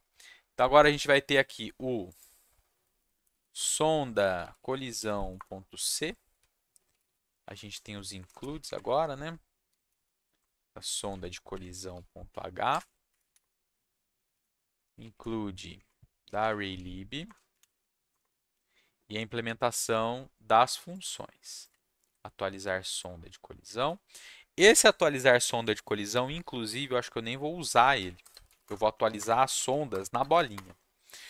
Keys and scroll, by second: 2.7-10.6 typing, 11.1 Left, 11.6-17.2 typing, 13.3 Return, 18.1 Return, 22.0 ctrl+c, 23.7 ctrl+v, 27.7 Up, 28.2 BackSpace, 28.4 shift+space, 28.5 shift+], 29.0 Down, 29.4 Down, 29.9 BackSpace, 30.2 space, 30.3 shift+], 30.5 Return.